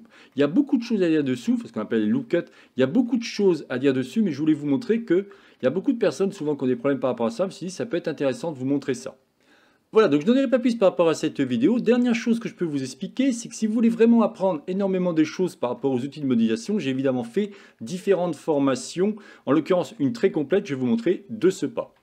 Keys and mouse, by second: 0.4 middle click, 1.4 shift+middle click, 3.0 shift+middle click, 4.9 Tab, 5.7-6.5 shift+middle drag, 7.4 shift+middle click, 9.1-9.4 shift+middle drag, 11.6-12.0 shift+middle drag, 15.7 Tab, 16.3 middle click.